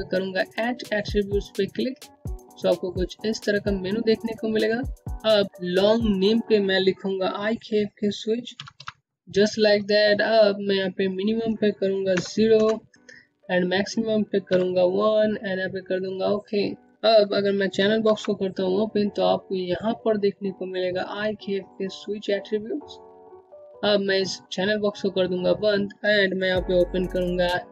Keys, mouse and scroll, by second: 4.0 click, 6.5 click, 6.7 k, 8.7-9.5 typing, 10.3 click, 11.4 KP_0, 11.7 KP_Enter, 13.7 KP_1, 15.2 click, 17.0 click, 17.3 alt+c, 25.7 c.